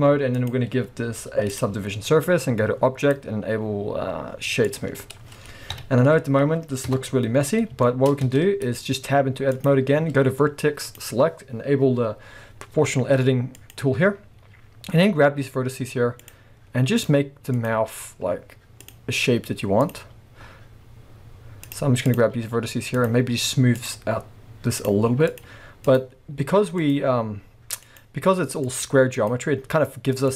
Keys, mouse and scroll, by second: 0.4-7.8 drag, 4.9-5.7 scroll down 2, 5.7 KP_1, 6.3-6.9 scroll up 2, 6.9 KP_0, 7.8-9.5 shift+middle drag, 8.2 Tab, 9.5 click, 10.9 click, 13.6 click, 14.3 scroll up 1, 15.0 g, 16.3 click, 17.0 click, 17.6 click, 17.7 g, 18.9 click, 19.8 click, 20.0 g, 22.1 click, 22.3 g, 23.1 click, 23.7 click, 24.0 g, 25.3 click, 25.5 g, 26.0 click, 26.8 click, 27.1 g, 28.0 click, 28.6 click, 29.2 click, 29.5 g.